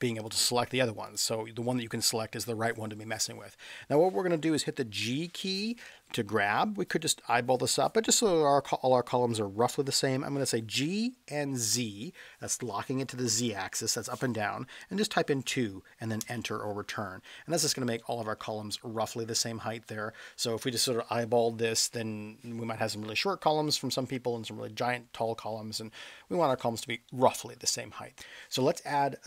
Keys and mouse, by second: 0.2 click, 1.0 click, 4.9 g, 11.6 z, 15.0 2, 16.2 Return, 18.0-18.6 middle drag, 27.1-27.5 middle drag.